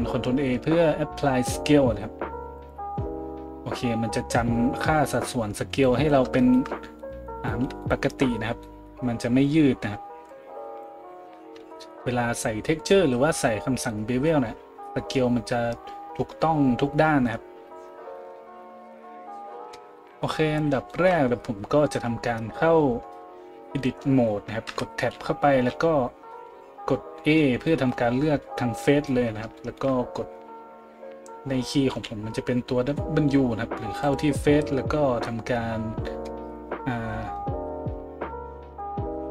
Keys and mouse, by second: 6.3-12.1 shift+middle drag, 10.4-39.3 drag, 18.3 a, 20.0 middle click, 20.0 right click, 24.7 Tab, 25.7 a, 31.9 w.